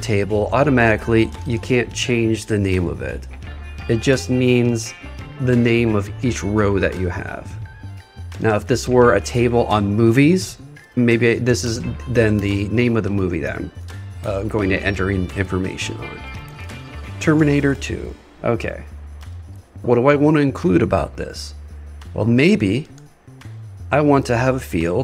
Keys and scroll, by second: 11.6 shift+t.